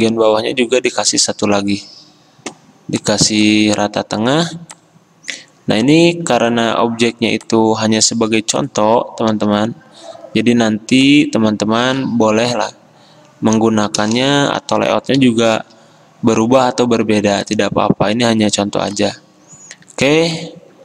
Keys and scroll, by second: 9.4 t, 11.9 ctrl+z, 14.0 BackSpace, 14.2 BackSpace, 15.2 Delete, 15.7 BackSpace.